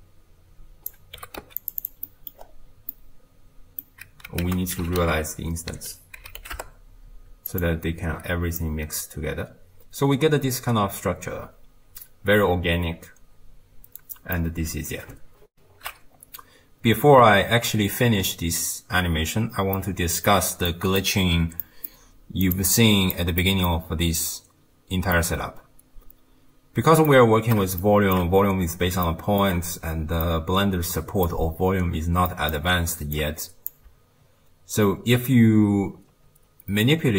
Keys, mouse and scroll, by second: 1.2 g, 1.8 click, 2.1 middle click, 2.4-2.8 scroll up 5, 2.9-4.5 middle drag, 4.5 ctrl+a, 8.6-11.7 middle drag, 15.6 ctrl+alt+shift+q, 19.7-22.5 middle drag, 22.5 click, 22.7 click, 23.4-28.4 middle drag, 28.4-28.9 scroll up 3, 29.1-29.8 shift+middle drag, 29.8-30.3 scroll up 1, 30.3-32.6 middle drag, 32.6-33.2 scroll up 3, 33.2 click.